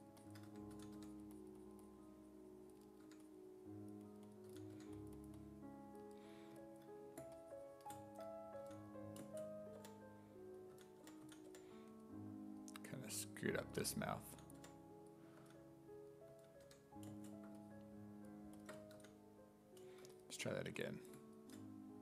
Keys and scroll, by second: 0.3-1.5 typing, 4.5 s, 4.8 1, 8.6 s, 9.8-12.0 typing, 14.3-16.7 typing, 19.0 w.